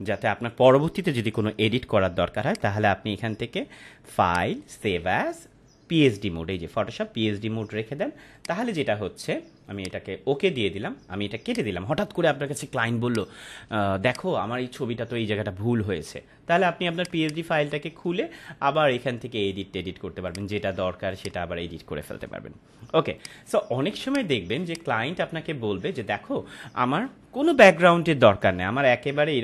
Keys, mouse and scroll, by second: 2.4 click, 8.3 click, 16.9 click, 20.2 click.